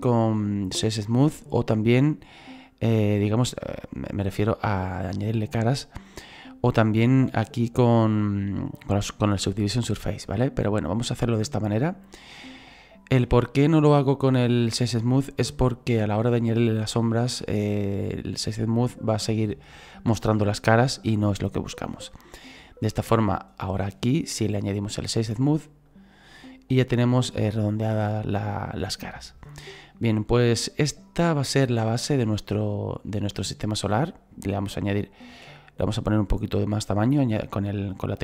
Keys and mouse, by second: 4.3 click, 7.2 click, 10.9 click, 12.3 middle click, 14.4 click, 20.9 shift+middle click, 24.6 click, 25.9 click, 29.2 shift+middle click, 33.4 middle click, 37.5 click.